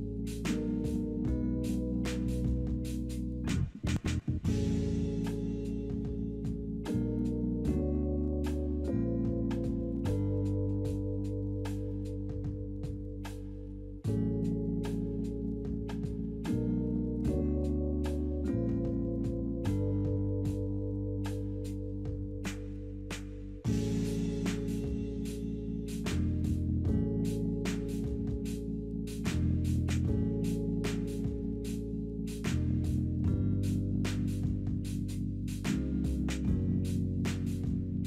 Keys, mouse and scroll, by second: 2.1-3.4 typing, 6.2 1, 8.5 Return, 8.5 1, 8.8 Return, 12.5-13.5 scroll up 2, 13.6-14.8 scroll down 2, 32.4 double click.